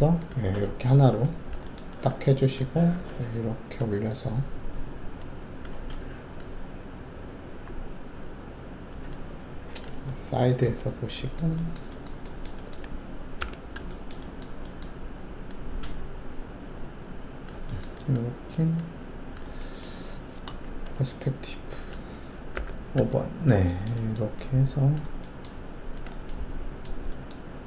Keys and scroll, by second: 10.6 alt+shift+4, 13.3 alt+4, 20.6 alt+shift+q, 22.5 5.